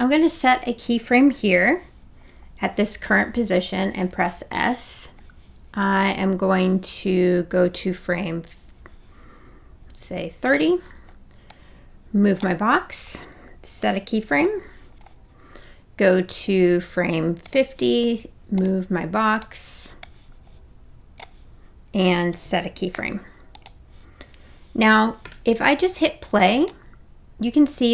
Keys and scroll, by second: 4.3 s, 13.8 s, 23.0 s.